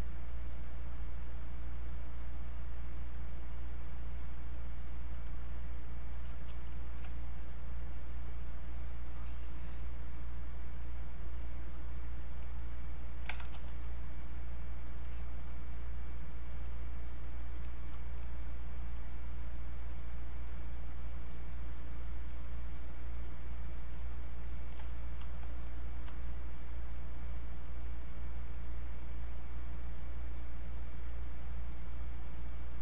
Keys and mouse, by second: 6.4 q, 8.7-10.8 ctrl+drag, 13.5 e, 15.0-22.3 alt+drag, 22.3-25.6 alt+drag, 25.6-32.8 drag.